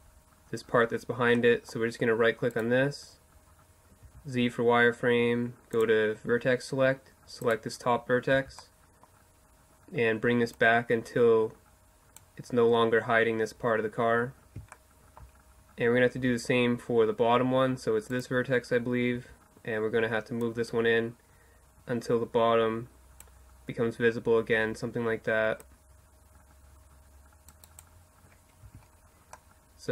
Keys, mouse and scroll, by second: 0.4-1.6 middle drag, 3.0 right click, 3.0 z, 4.8-6.4 drag, 7.3 right click, 7.3 z, 9.6-13.8 drag, 13.8-16.0 middle drag, 15.2 z, 17.1-19.5 right drag, 18.1 z, 19.5 click, 24.6-26.5 drag, 27.7 Tab.